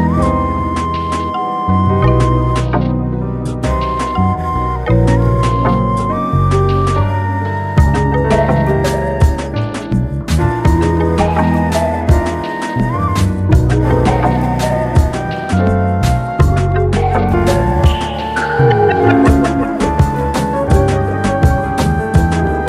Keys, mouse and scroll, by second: 0.9 g, 2.1 g, 3.3 s, 6.8-7.8 middle drag, 7.8 g, 10.4 scroll up 1, 10.8-11.4 middle drag, 11.4 g, 13.4 scroll down 3, 13.9-15.4 middle drag, 15.6-16.3 scroll up 2, 16.3 s, 18.9 alt+middle click, 19.5 g, 22.0-22.6 middle drag.